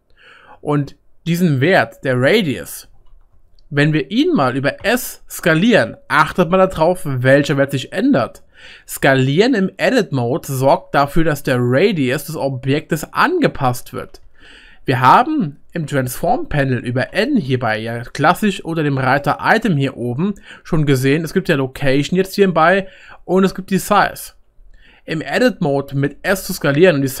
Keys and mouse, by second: 3.1 ctrl+z, 9.8 click, 9.8 middle click, 9.8 right click, 12.5-15.7 middle drag, 17.1 n, 19.2-25.7 middle drag, 19.2-27.2 right drag, 26.3 s.